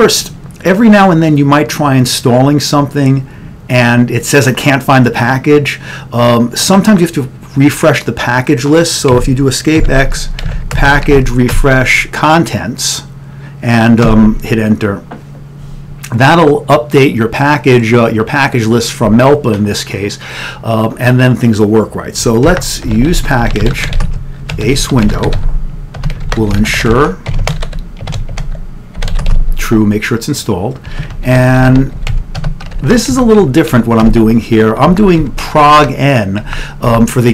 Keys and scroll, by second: 0.0 ctrl+n, 9.2 Escape, 9.6-11.6 typing, 14.8 Return, 22.6-29.3 typing, 30.9-35.3 typing, 36.6-37.3 typing.